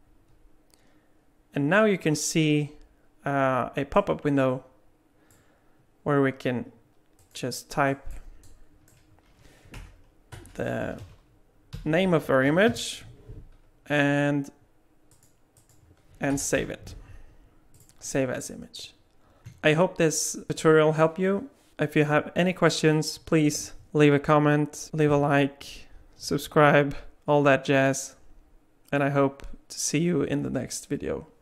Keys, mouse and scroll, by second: 19.4 ctrl+z.